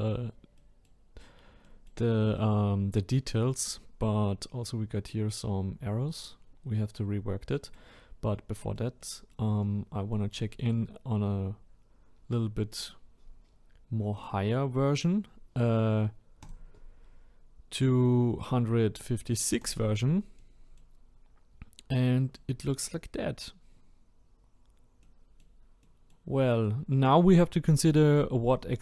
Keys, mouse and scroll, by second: 0.1-0.5 scroll down 2, 0.5-3.2 middle drag, 3.2-6.1 scroll up 3, 7.1-7.5 scroll down 2, 7.5-14.3 middle drag, 14.3-19.7 drag, 20.4-21.0 middle drag, 21.0-21.6 scroll up 2, 21.6-22.1 scroll down 1, 22.1-22.7 middle drag, 22.7-23.1 scroll down 1, 23.1-23.7 middle drag, 23.7-24.5 scroll up 1, 24.5-25.0 scroll down 2, 25.0-28.8 middle drag.